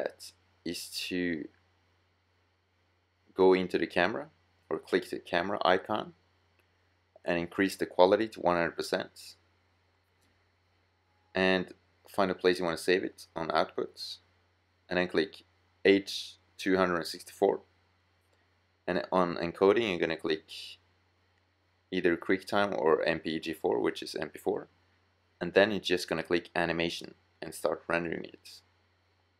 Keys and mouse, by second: 5.6 middle click, 7.0 middle drag, 8.1-9.3 middle drag, 10.3-10.9 middle drag, 14.0-15.7 drag, 18.4-18.8 drag, 18.9 middle drag, 20.5-21.0 drag, 22.6-23.1 middle drag.